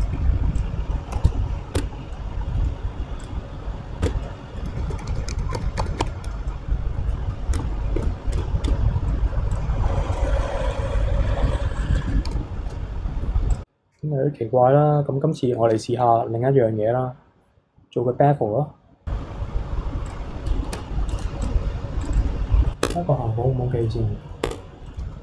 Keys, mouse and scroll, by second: 0.0 alt+click, 0.6-1.8 drag, 1.8 Tab, 2.1-3.2 middle drag, 3.2 click, 3.5-4.0 scroll up 4, 4.0 Tab, 4.2-4.9 middle drag, 4.9 ctrl+z, 5.1 ctrl+z, 5.4 ctrl+z, 5.6 ctrl+z, 5.8 ctrl+z, 6.0 ctrl+z, 6.5-7.5 middle drag, 7.5 a, 8.0 shift+n, 8.3 Tab, 8.6 Tab, 9.1-9.5 middle drag, 9.5 click, 10.1 alt+click, 10.7-12.2 drag, 12.3 ctrl+z, 13.5 alt+click, 15.6 ctrl+b, 21.1 click, 21.4 click, 22.0 click, 22.6 scroll up 1, 22.8 Tab, 23.2-23.5 scroll up 2, 23.5 scroll down 1, 23.8-24.4 middle drag, 24.4 Tab, 24.9-25.2 middle drag.